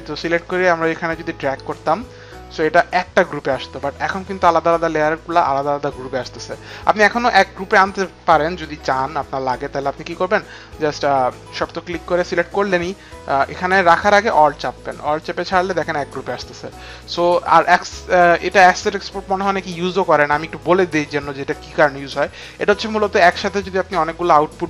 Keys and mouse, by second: 0.3 click, 6.9 ctrl+z, 9.3 alt+click, 10.7 alt+click, 11.6 alt+click, 13.1 alt+click, 15.3 click, 16.4 click, 17.3 Delete.